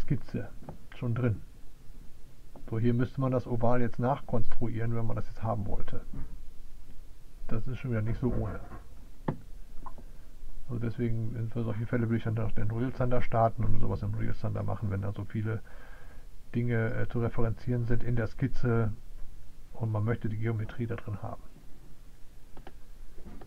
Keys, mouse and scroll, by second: 22.9 right click.